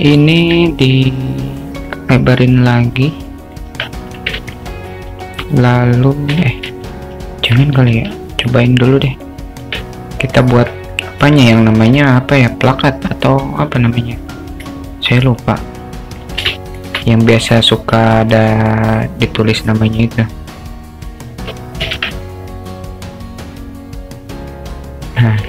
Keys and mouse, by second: 0.5 alt+z, 0.8 click, 1.8-3.7 drag, 3.8 Tab, 4.4 alt+z, 6.7 ctrl+z, 7.4 ctrl+z, 7.9 shift+a, 9.7 Tab, 10.2 click, 10.5 Tab, 11.3 Tab, 12.0 shift+a, 14.7 s, 16.5 alt+shift+middle drag, 18.2-19.8 drag, 20.5-21.9 drag, 22.0 ctrl+z, 22.3-25.3 drag.